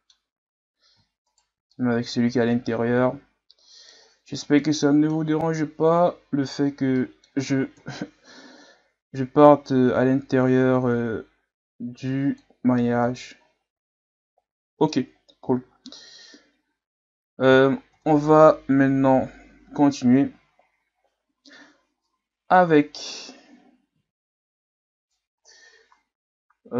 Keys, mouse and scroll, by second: 0.7-1.3 scroll up 1, 1.3 shift+right click, 1.7-5.1 middle drag, 5.1-6.1 scroll up 5, 6.1-6.8 scroll down 7, 7.0 middle click, 7.8 KP_1, 9.2-12.3 drag, 12.7 scroll down 1, 12.9 Tab, 13.4-15.0 scroll down 4, 15.0-15.8 scroll down 1, 15.8 ctrl+s, 16.9-17.6 scroll up 2, 17.6-18.8 scroll up 1, 18.8-20.8 scroll up 1.